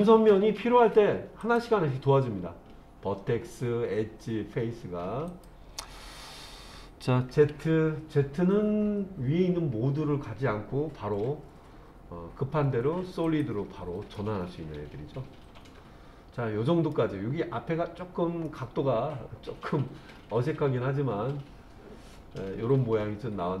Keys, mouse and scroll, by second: 1.4 click, 5.3 click, 7.3 z, 14.1-16.9 middle drag, 18.5-23.6 middle drag.